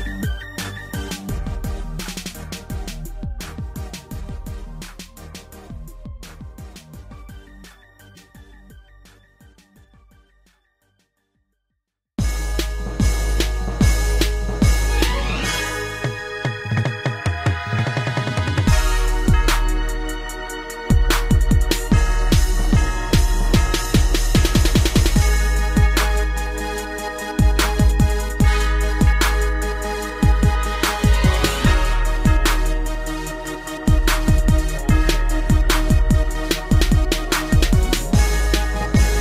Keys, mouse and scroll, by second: 3.2-3.6 typing, 4.8 -, 5.5 Return, 6.4 ctrl+c, 6.8 Down, 7.9-10.8 typing, 12.5 Return, 12.8 Down, 14.4-17.6 typing, 19.0 Return, 19.8 middle click, 21.4 3, 22.1 Down, 22.6 Right, 23.0 Right, 23.3 Right, 25.7 Down, 25.8 Down, 26.3 Up, 27.0 Right, 27.2 Right, 27.4 Right, 30.3 shift+middle click, 30.9 g, 31.1 y, 32.5 y, 37.9-38.3 typing.